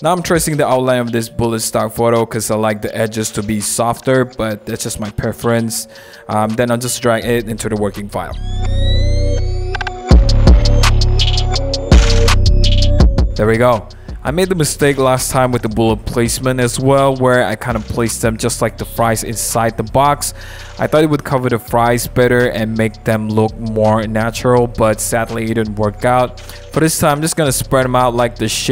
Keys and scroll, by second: 0.3 super+z, 3.9 super+=, 5.1 super+=, 7.4 m, 7.9 super+0, 11.0 super+=, 11.1 super+=, 11.6 super+d, 12.2 v, 12.7 super+0, 12.7 super+-, 12.8 super+a, 12.8 super+c, 13.5 super+v, 14.9 super+t, 21.0 super+j, 25.9 super+t.